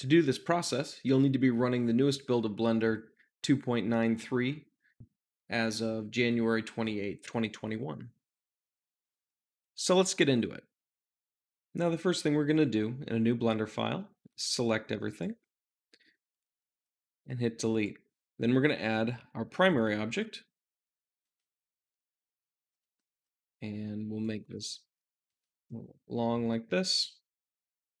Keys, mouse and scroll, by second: 14.2 a, 15.0 click, 15.2 a, 16.6 x, 17.6-19.6 drag, 20.0 shift+a, 21.1-22.6 drag, 22.6 Tab, 23.0 s, 24.1 click, 24.3 s, 24.4 middle click, 25.2 click, 25.6-28.0 middle drag.